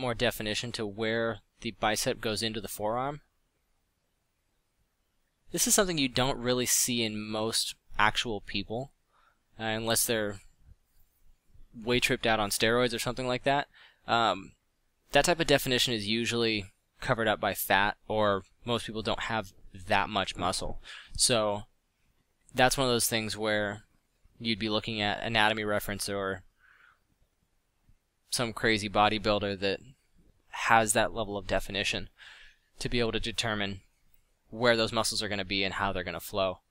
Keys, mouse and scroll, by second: 0.9 f, 2.8 ctrl+z, 5.1 f, 9.1 f, 16.5 middle click, 16.8-17.1 middle drag, 21.2 f, 23.3 f, 27.8 click.